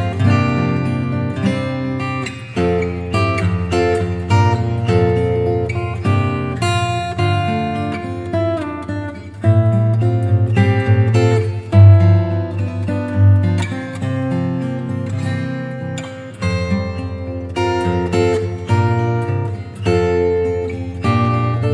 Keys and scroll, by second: 3.2 0, 7.8 [, 16.0 x, 17.3 space, 18.2 x.